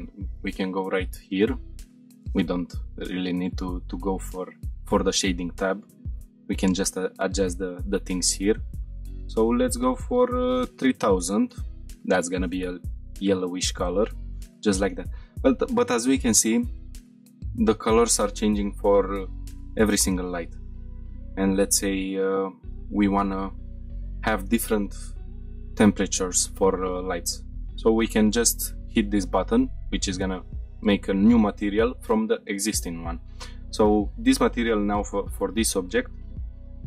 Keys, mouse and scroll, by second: 0.0 click, 5.6-6.2 drag, 6.2-8.2 scroll down 1, 8.2-11.4 drag, 10.4 shift+0, 10.5 shift+0, 13.0 scroll up 1, 13.6-13.9 shift+middle drag, 14.1 middle click, 14.6 scroll down 1, 18.0-18.6 middle drag, 18.7-19.3 shift+middle drag, 19.5 middle click, 20.1-20.8 scroll up 3, 20.8 scroll down 1, 21.4 shift+middle click, 21.8-22.2 scroll down 2, 22.3-22.9 scroll up 1, 26.3-30.5 scroll up 4, 30.5 click, 30.5 scroll up 1, 34.4 click, 35.3 g, 36.0 right click.